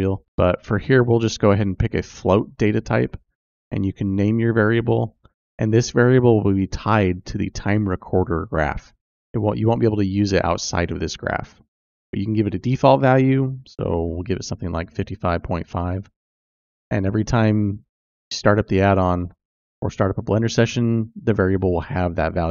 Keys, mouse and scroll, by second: 3.6 click, 3.8-11.2 drag, 11.6 click, 12.1-17.8 drag, 14.9 KP_5.